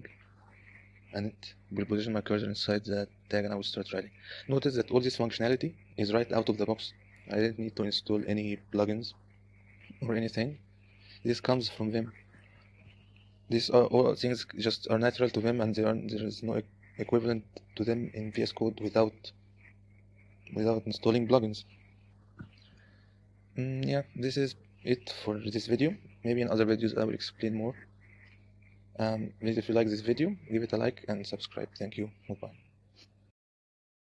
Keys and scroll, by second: 0.0 t, 3.6-4.6 typing.